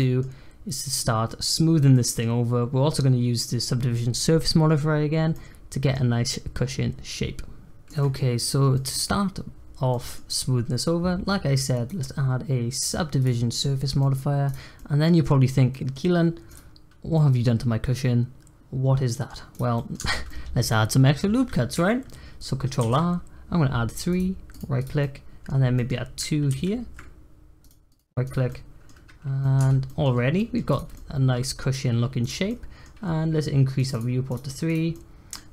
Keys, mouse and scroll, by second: 0.0-5.1 middle drag, 5.3-8.4 middle drag, 8.4 click, 8.7 middle click, 9.2-9.9 scroll up 1, 9.9-11.7 middle drag, 11.7-13.2 drag, 14.0-14.4 middle drag, 14.4 click, 14.7-15.4 middle drag, 15.4 scroll up 1, 15.7-16.5 middle drag, 16.5 click, 17.1-19.5 middle drag, 19.5 click, 19.7 middle click, 20.0 Tab, 20.2-22.7 middle drag, 22.7 ctrl+r, 24.7 click, 25.0 middle click, 25.7 scroll up 1, 25.7 middle click, 26.5 ctrl+r, 28.2 click, 28.5-29.6 middle drag, 29.6 Tab, 29.8 middle drag, 30.1 scroll down 3, 30.3-30.7 middle drag, 30.7 click, 30.9-31.9 middle drag, 31.9 scroll up 2, 32.2 click, 32.4-33.7 middle drag, 33.7 click, 34.9-35.5 middle drag.